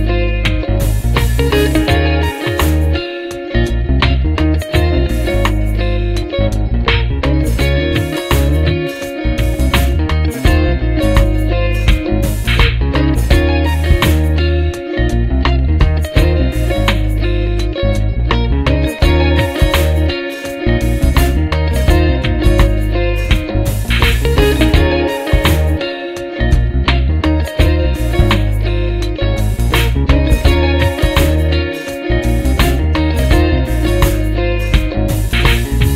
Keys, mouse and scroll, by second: 1.3 click, 3.0 click, 4.3 KP_Subtract, 7.1 KP_Add, 8.7-9.8 drag, 11.0 ctrl+g, 12.0 click, 14.3 shift+F6, 18.3 click, 20.0-21.3 drag, 22.1 click, 22.8 click, 24.6 click, 25.5 click, 26.6 F1, 27.8 click, 28.5 click, 28.9 click, 30.6 click, 31.3-32.4 drag, 32.8 click.